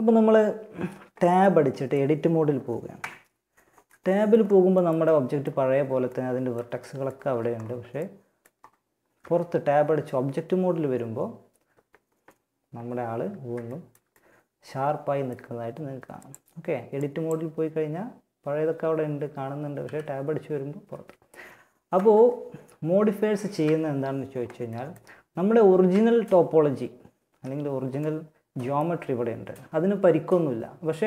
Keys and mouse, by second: 2.1 Tab, 6.4 a, 8.4 Tab, 12.9-15.2 middle drag, 15.3-19.0 drag, 19.0 Tab, 21.1 Tab, 22.8 Tab, 25.1 Tab, 28.7-30.7 middle drag.